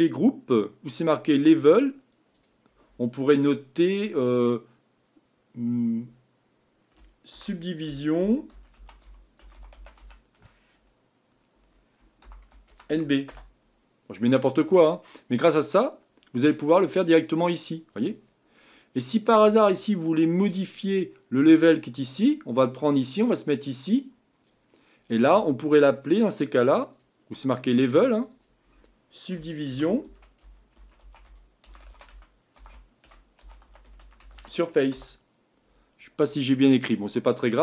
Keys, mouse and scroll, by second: 13.3-24.5 drag, 34.9-37.6 drag.